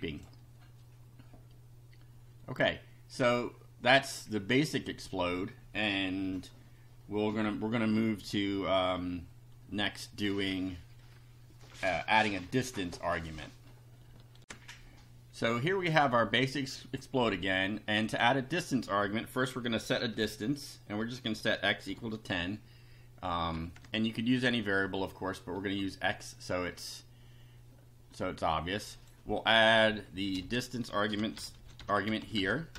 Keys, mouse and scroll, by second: 0.2 click, 4.9 click, 14.4 ctrl+r, 18.0 click, 19.4 Up, 19.8 x, 21.0 =, 21.3 1, 21.9 0, 22.3 ;, 23.3 Up, 23.5 End, 23.8 Return, 24.1 Down, 29.0 click, 30.1 Right, 30.4-32.7 typing.